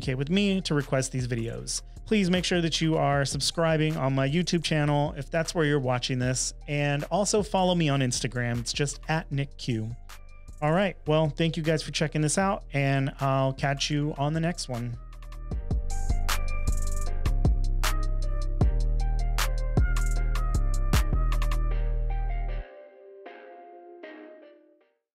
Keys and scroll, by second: 8.5 space.